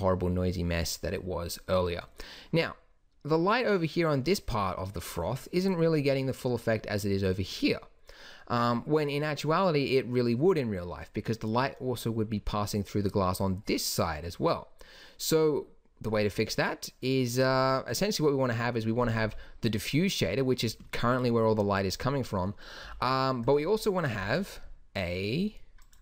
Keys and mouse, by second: 17.6-19.2 drag, 19.2 g, 23.0 g, 24.2 shift+a.